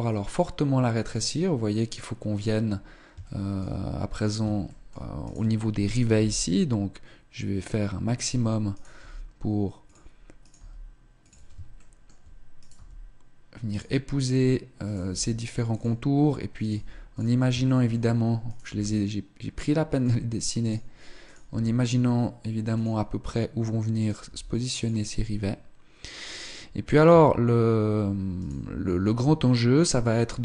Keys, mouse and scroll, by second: 2.1 click, 2.4 scroll down 2, 2.5 shift+middle click, 3.3-3.7 scroll up 1, 4.1 shift+middle click, 4.1 right click, 5.9 g, 8.4 right click, 8.7 g, 9.6 click, 10.1 right click, 10.3 g, 11.5 shift+middle click, 11.6 right click, 12.5 g, 13.5 click, 14.1 right click, 14.1 g, 16.3 right click, 16.4 g, 17.3 shift+middle click, 17.5 right click, 18.3 g, 20.3 right click, 21.1 right click, 21.2 g, 21.9 click, 23.7 right click, 23.9 g, 25.9 right click, 26.8 Tab, 28.0 Tab, 28.0 right click, 28.9 Tab, 30.3 shift+middle click.